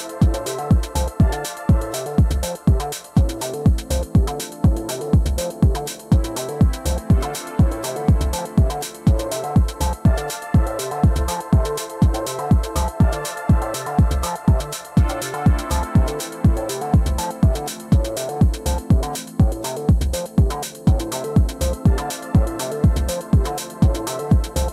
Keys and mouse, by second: 2.6 alt+click, 3.2 alt+middle click, 4.5-6.5 drag, 7.8-9.0 drag, 10.1 alt+click, 11.9 click, 13.8-15.2 alt+drag, 15.4 alt+middle drag, 16.0-16.5 alt+drag, 17.0-17.5 alt+drag, 17.7 click, 20.5 alt+middle click, 20.7-21.0 alt+drag, 21.2 alt+click, 21.4 r, 21.9 click, 22.1 click, 22.6 alt+click, 23.1 click, 23.8 alt+click, 24.0 w, 24.2 click.